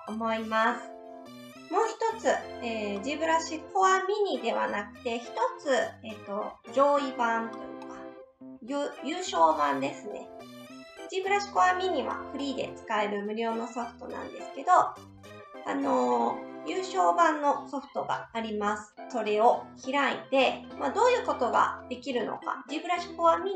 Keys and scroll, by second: 18.4 alt+Tab.